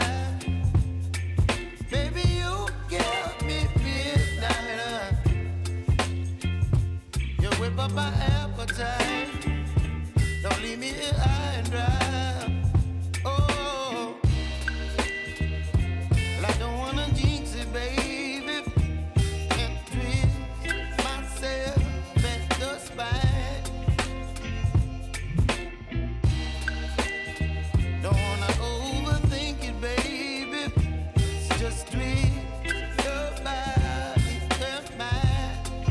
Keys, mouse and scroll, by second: 1.5 click, 2.9 ctrl+shift+c, 3.5-7.4 typing, 7.5 Return, 8.5 click, 9.1 ctrl+d, 11.2 ctrl+d, 12.0 click, 14.7 shift+Num_Lock, 14.7 click, 17.7 t, 18.6-19.9 drag, 25.8 Return, 26.8 =, 27.6-30.6 drag, 31.3 [, 32.8 click, 33.8 [, 35.0 click.